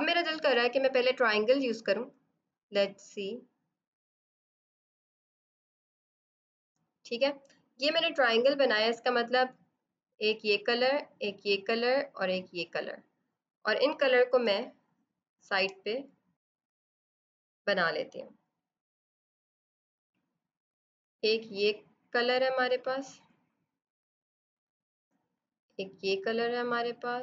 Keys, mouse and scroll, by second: 0.3 click, 9.9 click, 14.4 space, 14.6 click, 14.9 space, 16.8 alt+click, 17.8 right click, 18.5 click, 19.2 right click, 19.3 click, 19.4 ctrl+z, 19.5 alt+click, 19.6 right click, 19.8 click, 25.1 click, 25.9 click.